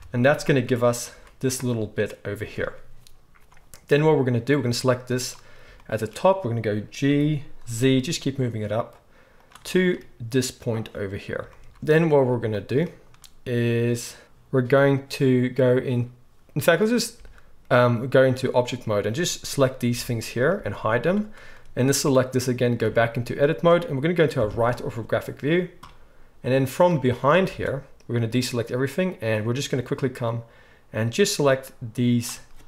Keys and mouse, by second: 0.5 z, 1.1 z, 4.6-9.5 drag, 7.1 g, 9.5-17.1 shift+middle drag, 11.6 z, 17.1 Tab, 19.9 h, 20.5 h, 21.0 click, 22.8 Tab, 24.4 KP_3, 26.6-32.6 drag, 27.5 alt+a.